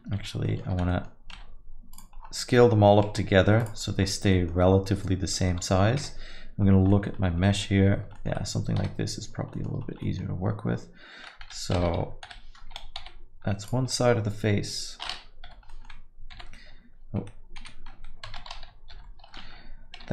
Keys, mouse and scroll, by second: 0.2 ctrl+z, 0.4 middle click, 0.9 middle click, 0.9 a, 1.1 scroll down 2, 1.3 s, 2.1-3.0 scroll down 8, 2.8 middle click, 3.1 s, 3.9 scroll down 2, 4.3 middle click, 4.7-5.4 scroll up 1, 5.4 middle click, 5.4 scroll up 1, 6.0 KP_Divide, 6.6 scroll down 1, 6.9 alt+middle click, 7.2 scroll down 2, 7.4 alt+middle click, 8.1 alt+middle click, 8.8 KP_7, 9.5 middle click, 9.8 scroll up 2, 10.0 middle click, 11.4 alt+a, 12.2 l, 13.0 g, 13.9 middle click, 15.5 l, 15.7 middle click, 16.3 g, 18.3 alt+a, 18.9 l.